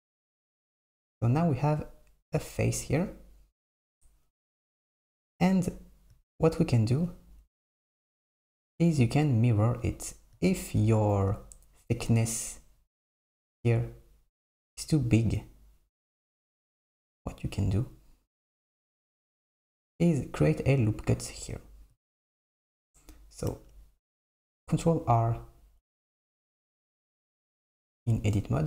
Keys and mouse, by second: 7.2 KP_1, 11.0 KP_1, 19.7 Tab, 23.6 Tab, 23.7 Tab, 25.0 ctrl+r, 26.7 Tab, 27.8 ctrl+r.